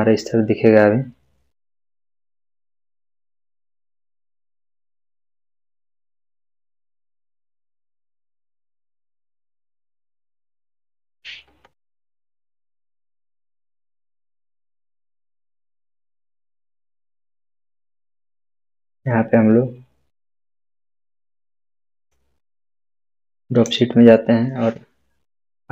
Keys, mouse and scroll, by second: 9.4 click, 13.7-15.6 drag, 21.9 click.